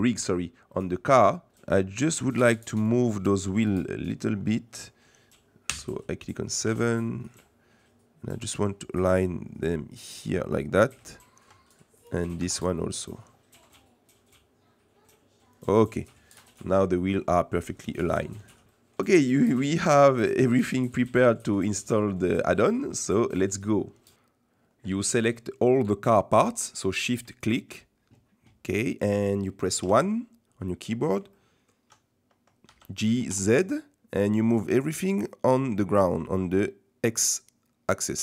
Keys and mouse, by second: 0.7 middle click, 1.3 middle click, 2.8 middle click, 4.1 middle click, 5.6 KP_7, 6.6 r, 11.1 shift+middle click, 12.4 r, 16.0 middle click, 16.9 middle click, 18.1 middle click, 18.6 shift+middle click, 19.1 middle click, 22.5 middle click, 26.6 middle click, 29.8 KP_1, 31.3 shift+middle click, 32.6 g.